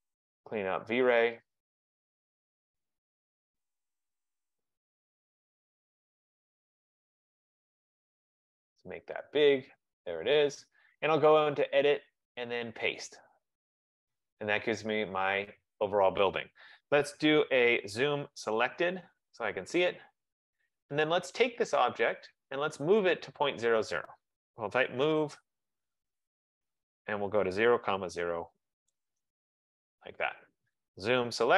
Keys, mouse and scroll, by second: 0.7 click, 1.7 click, 2.6 click, 3.5 click, 4.5 click, 5.4 click, 7.4 click, 9.5 click, 11.7 click, 13.3 F15, 15.7 click, 18.0 z, 18.2 Return, 18.5 s, 18.6 Return, 20.2 click, 21.0-22.0 drag, 23.5 click, 24.3-26.0 typing, 26.9 click, 27.3-31.5 typing.